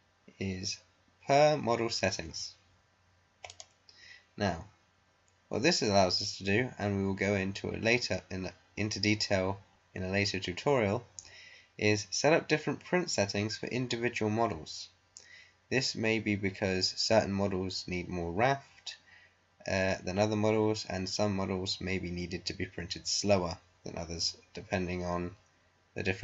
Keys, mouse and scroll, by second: 3.4 click.